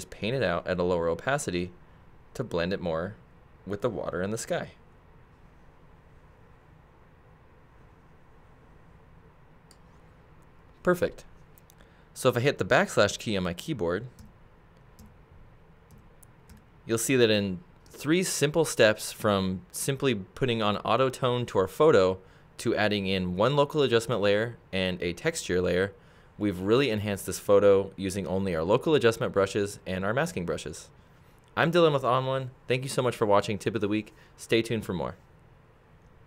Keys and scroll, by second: 14.2 \.